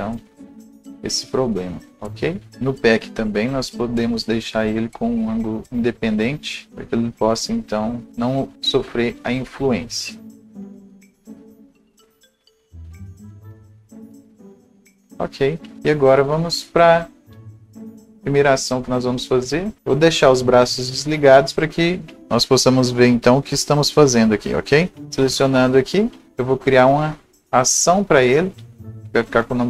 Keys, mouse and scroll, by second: 0.2-0.6 scroll up 1, 0.6 right click, 1.3-1.6 scroll up 1, 2.5-15.8 drag, 14.5-19.8 right drag, 15.8 Delete, 15.8 scroll up 1, 17.6 click, 18.6 click, 19.8 scroll down 1, 20.0-22.2 right drag, 22.8-28.8 right drag, 22.8 scroll down 1, 23.0-27.0 drag, 28.8 click.